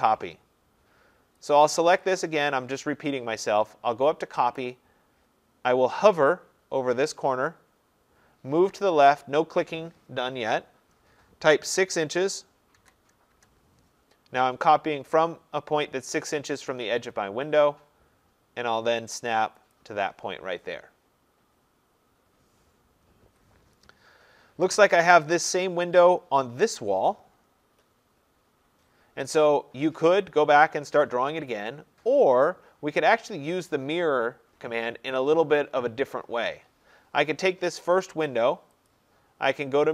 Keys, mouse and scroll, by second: 0.8 middle click, 1.6 middle click, 1.6 click, 2.2 click, 4.6 click, 5.2 middle click, 5.4 middle click, 9.8 scroll, 11.7 6, 12.8 shift+', 13.4 Return, 17.5-18.4 scroll, 19.8 click, 23.2 Return, 24.2-24.8 scroll, 24.9 scroll up 2, 25.0-26.0 scroll down 1, 37.4 click, 38.9 click.